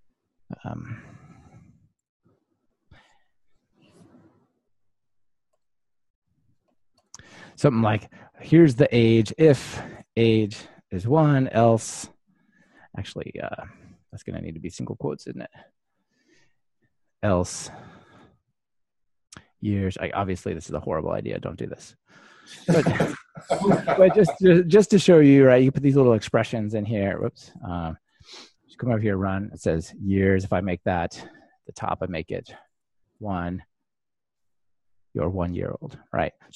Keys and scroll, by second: 21.6 super+c, 23.7 super+v, 26.6 super+s, 28.2 ctrl+r, 34.1 ctrl+r.